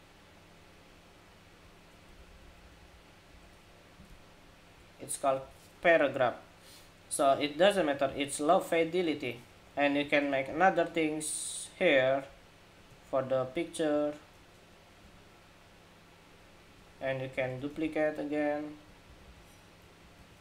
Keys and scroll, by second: 1.9 alt+Down, 2.0 alt+Down, 2.2 alt+Down, 2.4 alt+Down, 2.5 alt+Down, 3.1 alt+Up, 17.1 super+d, 19.9 super+d.